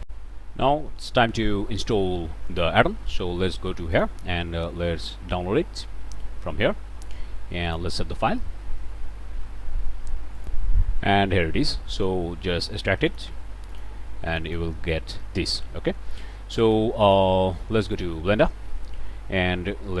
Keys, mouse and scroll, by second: 0.0 click, 2.5 click, 3.9 click, 7.6 click, 10.3 click, 12.0 right click, 13.0 click, 13.7 click, 14.3 click, 16.6 click, 17.0 click, 17.9 click, 18.7 middle click.